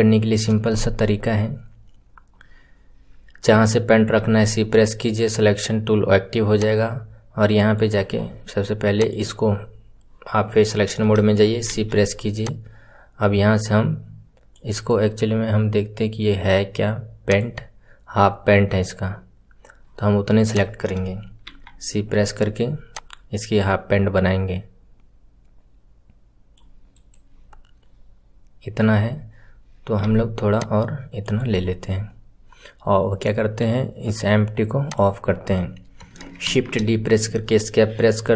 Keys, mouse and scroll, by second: 8.9-11.6 drag, 11.6 c, 17.3 click, 20.4 click, 27.2-28.6 scroll down 3, 28.6-30.0 scroll up 6, 30.0-32.0 scroll up 1, 32.0-34.8 scroll up 1, 34.8 click.